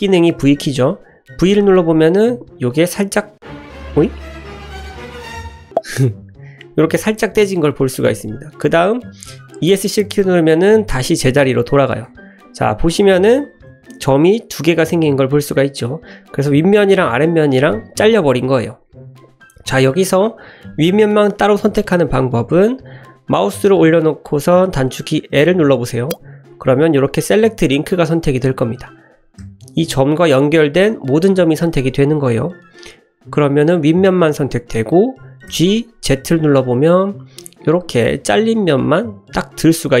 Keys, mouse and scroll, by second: 1.5 v, 9.6 Escape, 12.1 1, 13.0 drag, 13.7 g, 14.5 click, 15.4 ctrl+z, 18.5 click, 19.7 middle click, 25.3 l, 28.4 middle click, 29.4 l, 29.9-30.8 drag, 30.8 l, 33.5-33.8 middle drag, 33.8-34.5 drag, 35.5 g, 36.1 z, 39.6-40.0 middle drag.